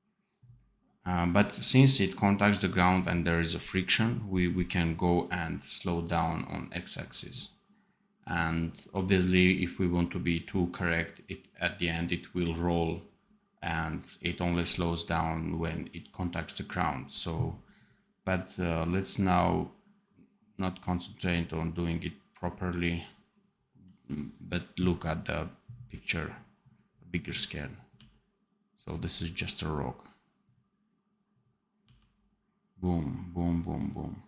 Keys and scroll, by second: 27.9 d, 31.7 d.